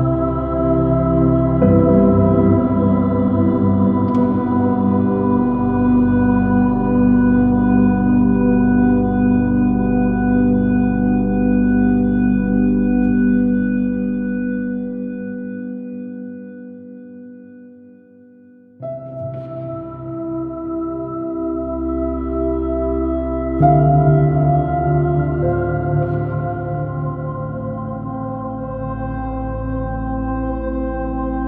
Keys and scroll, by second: 9.0 super+z, 10.6 space, 12.5 b, 14.7 space, 17.9 space, 18.2 r, 18.5 b, 21.4 space, 26.1 space, 28.5 space, 29.6 space.